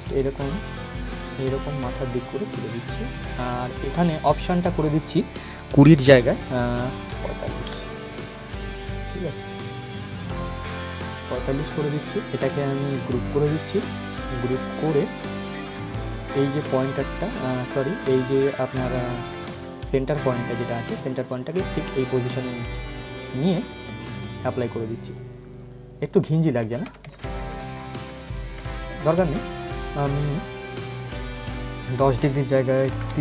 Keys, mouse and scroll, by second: 0.3-2.5 drag, 8.5 click, 9.2-9.7 scroll down 1, 11.4-12.8 drag, 12.8 ctrl+g, 13.0 ctrl+click, 13.4-19.0 drag, 19.0 ctrl+z, 19.2-23.9 drag, 26.2 ctrl+z, 29.3 click.